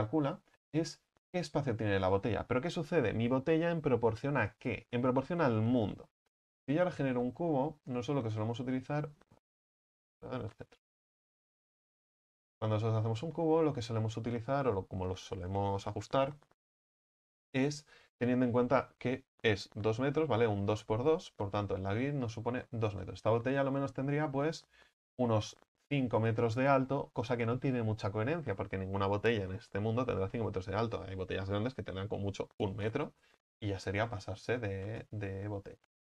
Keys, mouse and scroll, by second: 0.0 Tab, 0.6-2.1 middle drag, 2.1-4.7 scroll down 4, 8.1 shift+a, 8.9-9.5 scroll down 2, 9.5 ctrl+z, 10.6 shift+c, 11.2 shift+a, 13.0 scroll down 3, 13.4-21.0 middle drag, 21.0 KP_1, 34.5 right click, 35.2-36.1 scroll up 2.